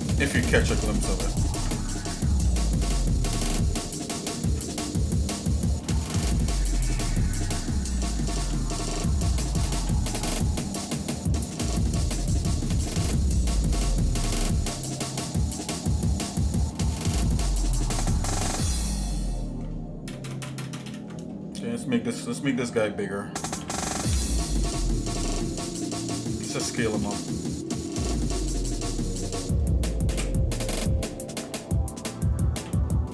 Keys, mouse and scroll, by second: 0.4 shift+middle click, 1.5 Tab, 2.0 shift+middle click, 2.9 click, 3.3 middle click, 4.0 click, 4.4 Tab, 5.0 click, 5.5 shift+middle click, 6.0 ctrl+Tab, 6.8 click, 7.9 g, 12.4 shift+middle click, 13.2 click, 13.7 shift+middle click, 14.3 middle click, 15.6 middle click, 16.2 shift+middle click, 17.1 middle click, 17.8 click, 18.5 click, 20.0 ctrl+KP_Add, 20.2 ctrl+KP_Add, 20.5 ctrl+KP_Add, 20.8 ctrl+KP_Add, 20.9 ctrl+KP_Add, 21.6 shift+middle click, 22.5 scroll down 1, 23.6 s, 27.1 s, 30.3 KP_7, 31.1-31.7 scroll up 3, 32.5 g.